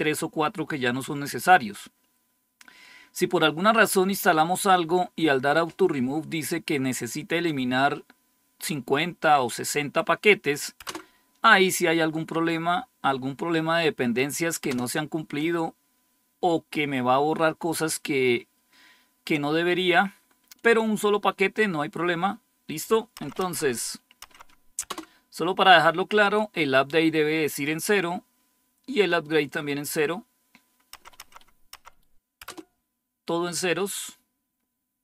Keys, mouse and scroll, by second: 10.7 Return, 14.6 Return, 23.1 Up, 23.3 Up, 24.2 Up, 24.8 Return, 30.9 Up, 31.1 Up, 31.7 Up, 32.3 Return.